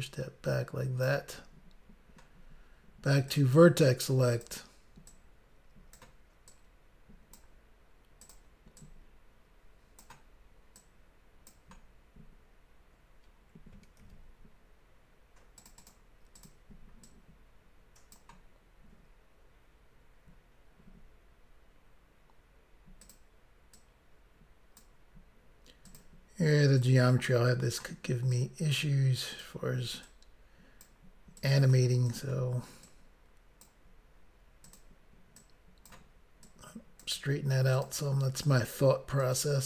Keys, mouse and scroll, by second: 3.3 click, 3.4 click, 4.4 click, 4.5 click, 5.1 click, 6.5 click, 7.4 click, 8.4 click, 8.8 click, 10.8 click, 14.0 ctrl+r, 15.6 click, 15.7 click, 15.8 click, 15.9 double click, 16.4 double click, 16.5 double click, 17.1 double click, 23.1 click, 23.2 click, 23.8 click, 25.9 click, 26.0 click, 26.8 click, 28.4 click, 29.4 click, 29.5 click, 30.1 click, 31.4 click, 31.6 click, 32.1 click, 32.3 click, 32.9 click, 33.6 click, 34.7 click, 34.8 click, 35.4 click, 36.5 click, 37.8 click, 37.9 click, 38.5 click, 39.3 click.